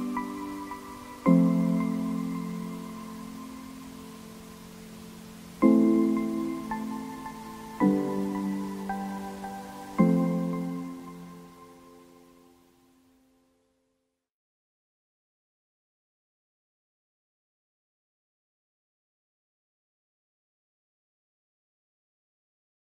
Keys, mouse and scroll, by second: 0.1-5.0 typing, 0.8 middle click, 1.5 middle click, 2.2 scroll up 1, 2.3 middle click, 3.3 middle click, 4.8 click, 5.3 click, 5.8 shift+click, 6.1-8.8 typing, 6.5 scroll down 3, 7.7 click, 9.1-10.6 drag, 10.6 shift+a, 10.9 scroll up 6, 11.1 KP_0, 11.3 scroll down 2, 11.3 middle click, 11.4 a, 11.5 middle click, 11.7 scroll up 1, 12.7 g, 13.1 scroll down 3, 13.2 middle click, 13.8 scroll up 1, 14.0-17.0 typing, 14.9 middle click, 15.6 middle click, 17.9-19.9 drag, 19.9 shift+middle click, 20.6-22.2 shift+middle drag, 22.2 click.